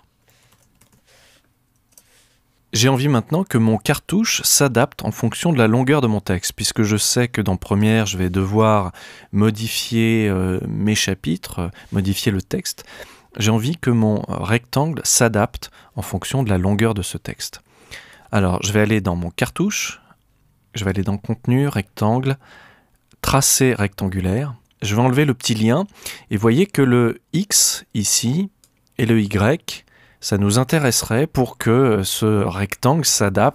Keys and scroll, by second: 1.0-2.0 typing.